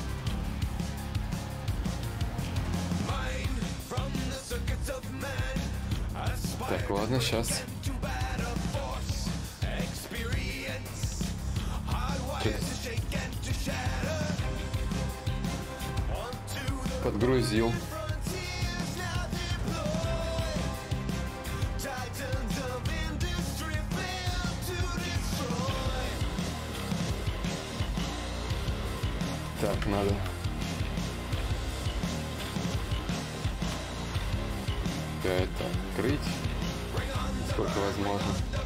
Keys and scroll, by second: 21.6 shift+d, 23.9 shift+d, 34.2 ctrl+z, 38.1 shift+f.